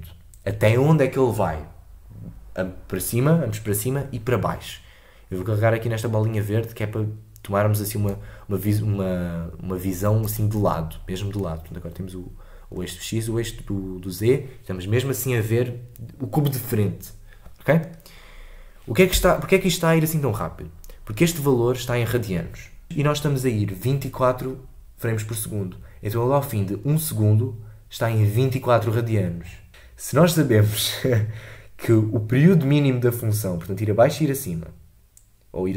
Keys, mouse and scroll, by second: 10.2 click, 12.8 scroll down 1, 17.9-18.6 scroll down 1, 18.6-19.1 scroll up 2, 19.1 space, 22.8 shift+Left.